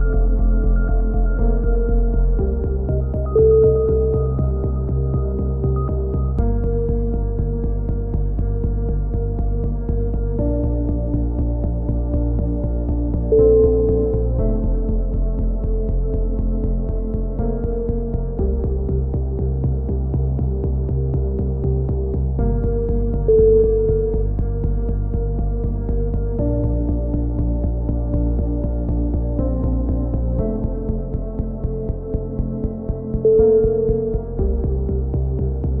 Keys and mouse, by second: 1.1-1.8 drag, 1.1-1.8 right drag, 2.1 g, 4.7-6.8 middle drag, 7.1 a, 7.3 z, 7.6 Tab, 10.9 KP_1, 11.4 Tab, 11.6 z, 13.8-15.3 middle drag, 15.3-20.6 right drag, 15.3 c, 16.3 c, 20.6 a, 21.1 c, 23.0-23.5 right drag, 23.0 c, 23.5-24.0 middle drag, 24.0 right click, 24.6-25.1 middle drag, 26.6-27.7 middle drag, 26.6 a, 26.8 c, 27.7-28.1 right drag, 28.1-28.6 middle drag, 29.2 a, 29.3 c, 30.3-31.0 right drag, 30.5-31.0 drag, 31.2 a, 31.5 z, 32.3 click, 33.6-35.8 drag.